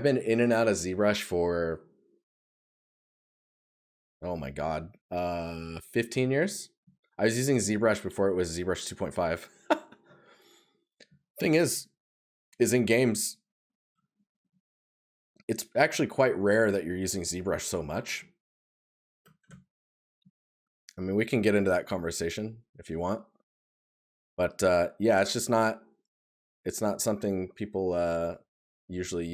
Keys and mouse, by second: 6.1 right click, 9.4 right click, 17.3 right click, 23.6 right click.